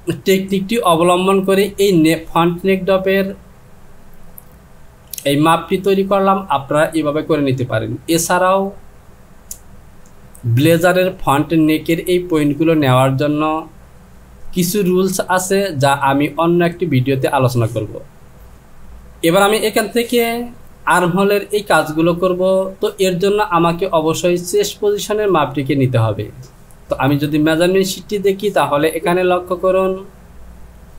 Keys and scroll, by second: 19.0 j.